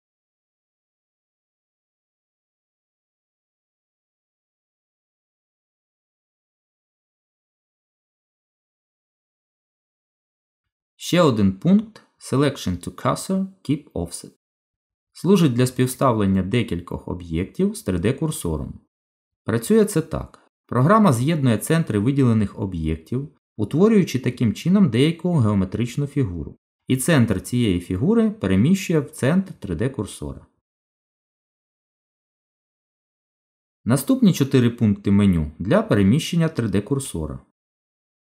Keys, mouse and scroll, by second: 0.5 g, 2.5 middle click, 3.1 click, 4.8 click, 6.3 shift+click, 6.4 shift+click, 7.5 click, 11.9 shift+s, 16.2 middle click, 30.5 click, 32.3 shift+s.